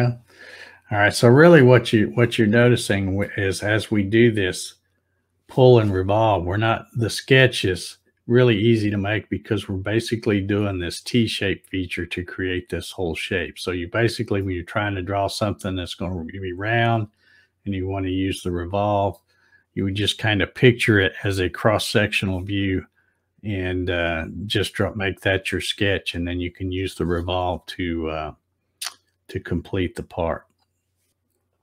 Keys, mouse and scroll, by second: 0.1 click, 1.2 scroll down 1, 1.6-3.4 scroll up 2, 4.4-5.1 scroll up 3, 5.5 scroll up 1, 6.1 scroll down 2, 6.7 scroll up 2, 14.5-16.6 middle drag.